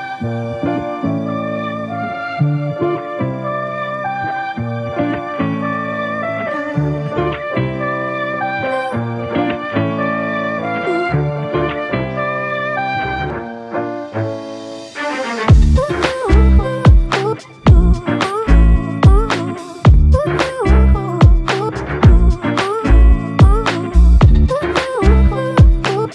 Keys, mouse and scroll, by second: 1.1 double click, 5.5 f, 6.5 alt+click, 8.5 alt+click, 10.7 double click, 11.2 f, 12.1 double click, 13.6 shift+click, 13.9 shift+double click, 14.2 shift+click, 17.4 alt+click, 19.4 double click, 20.4 shift+click, 20.7 shift+double click, 21.0 alt+click, 24.1 alt+click.